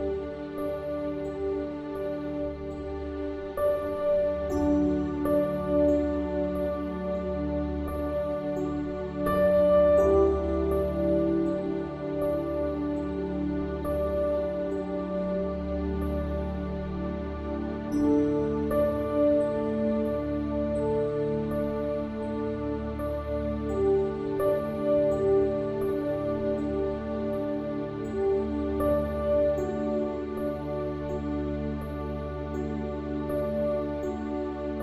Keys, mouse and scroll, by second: 0.9 e, 2.5 click, 3.9 r, 5.3 click, 5.5 w, 6.8 s, 8.0 click, 8.7 middle click, 9.0-10.2 drag, 10.7 alt+s, 11.7 ctrl+z, 12.8 click, 13.8-15.7 drag, 16.2 click, 16.3 s, 17.3 click, 17.7 middle click, 18.1 e, 19.8 middle click, 20.9-23.0 drag, 23.2 click, 23.5 e, 26.3 middle click, 27.0 r, 28.5 click, 30.0 click, 30.8 KP_1, 31.8 z, 32.6 z, 33.4 Tab, 33.7 KP_1.